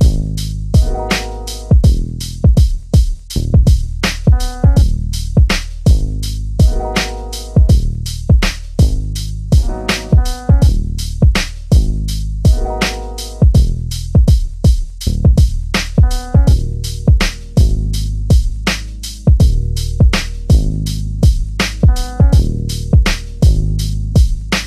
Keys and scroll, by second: 4.8 3, 9.2 l.